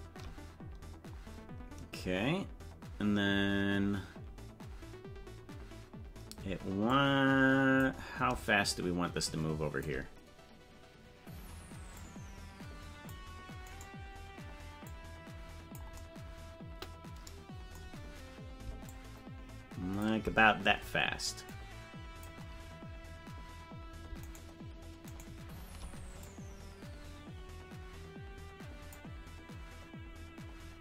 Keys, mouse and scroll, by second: 0.5 shift+right click, 4.6 scroll down 5, 7.0 click, 7.0 scroll down 1, 8.6-9.9 shift+drag, 11.9-13.1 drag, 13.9 right click, 14.8-15.8 drag, 18.8-20.0 shift+drag, 21.5 click, 24.5 shift+right click, 25.8 shift+right click, 26.2-28.9 drag.